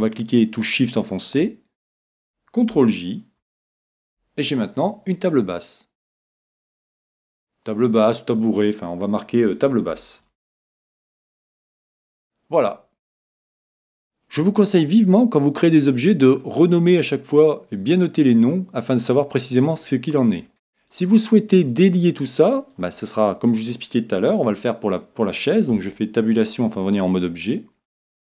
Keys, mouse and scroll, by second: 0.9 right click, 3.4 ctrl+j, 6.3-8.4 drag, 14.9-16.7 middle drag, 20.5 click, 21.0-22.8 middle drag, 25.7 Tab, 26.4-28.0 middle drag, 28.1 right click.